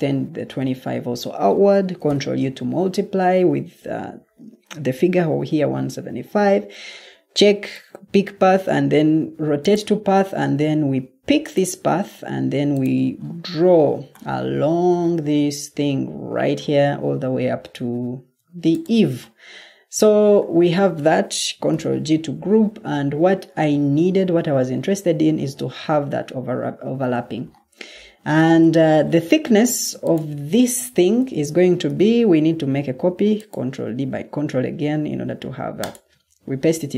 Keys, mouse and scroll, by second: 2.0 ctrl+u, 21.6 ctrl+g, 28.4 Escape, 31.4 ctrl+d.